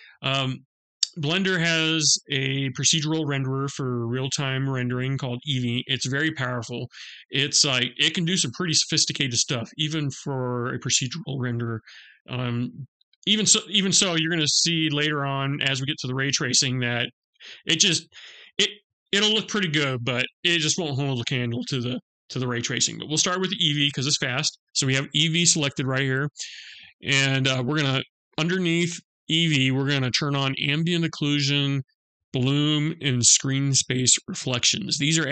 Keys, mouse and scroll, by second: 30.1 click, 31.5 click.